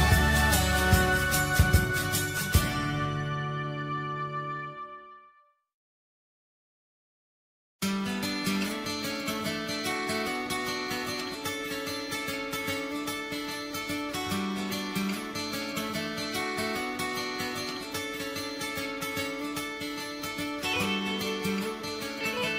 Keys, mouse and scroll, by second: 16.4 click, 16.5 right click, 17.4 right click, 18.1 right click.